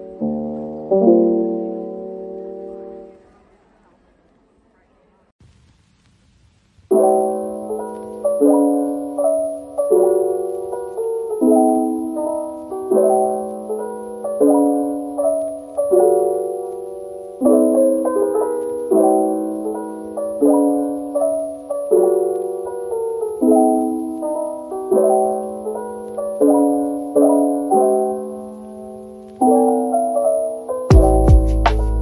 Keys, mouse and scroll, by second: 0.2 double click, 3.0 ctrl+j, 3.9 middle click, 5.2 double click, 6.4-9.3 typing, 10.0 Return, 10.6-11.0 scroll down 1, 11.0 middle click, 12.4-13.2 typing, 13.0 double click, 13.7 double click, 14.5-15.7 typing, 17.6-19.2 typing, 28.1-29.4 typing, 28.9-30.1 scroll down 1, 30.1 middle click, 30.6 Tab.